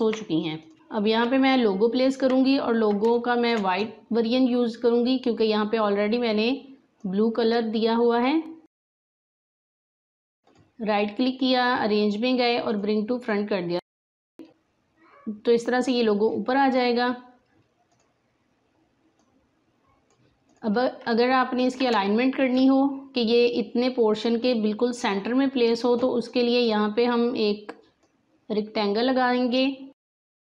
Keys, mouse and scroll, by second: 0.6 click, 1.0 space, 2.5-2.9 alt+scroll down 1, 3.0-6.1 drag, 7.0-10.4 drag, 10.4 right click, 12.6 click, 13.6 alt+scroll up 1, 13.9 space, 16.2 click, 19.4 click, 21.5 alt+scroll up 2, 21.9 click, 22.3 space, 25.6-30.5 drag.